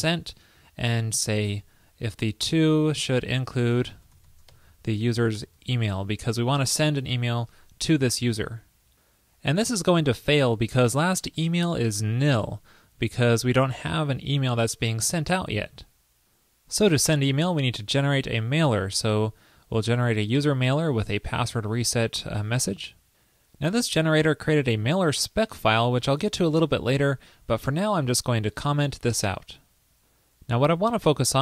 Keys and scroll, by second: 6.3 super+Right, 8.2 super+s, 18.4 super+v, 27.6 super+a, 28.3 super+/, 29.2 super+s.